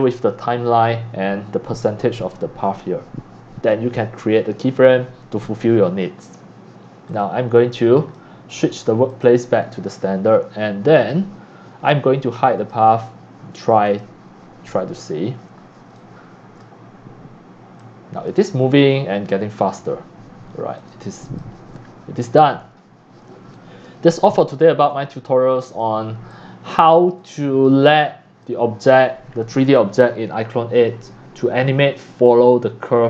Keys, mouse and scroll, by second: 0.1 click, 5.0 click, 5.2 click, 6.0 click, 7.1 click, 8.0 click, 9.4 click, 10.0 scroll down 2, 10.2 middle drag, 10.5-11.3 scroll up 2, 11.3-12.4 drag, 12.6 click, 13.9 click, 14.7 click, 14.7 scroll up 1, 15.9 c, 16.5 c, 16.6 c, 16.7-17.9 drag, 17.8 c, 18.3-19.7 drag, 19.7 middle click, 19.7 scroll down 1, 19.9 scroll, 20.1 scroll down 2, 20.8 click, 21.3 click, 23.5-28.0 typing, 23.5 drag, 25.8-26.3 drag, 26.9-27.4 drag, 27.7 click, 28.4 click, 29.4-32.0 drag, 32.9 drag.